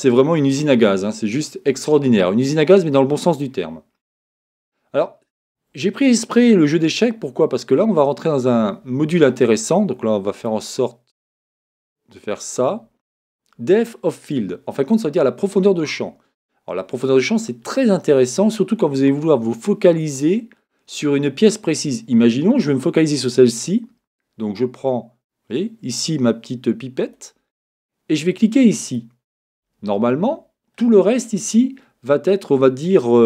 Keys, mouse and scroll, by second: 12.9 click, 27.0-29.0 drag.